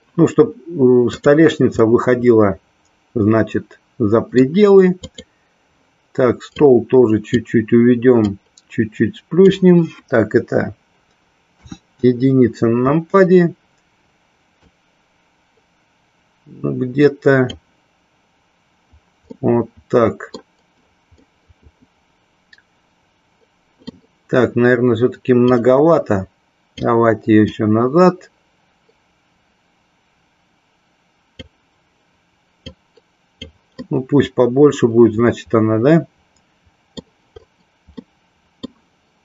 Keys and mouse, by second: 2.0-4.5 middle drag, 5.2 click, 6.8 click, 8.5-9.7 drag, 11.7 KP_1, 14.8-17.7 drag, 19.6-20.6 middle drag, 21.3-24.1 middle drag, 25.7-27.0 drag, 27.7-31.5 drag, 32.7 click, 33.8-37.1 middle drag, 38.2 middle click.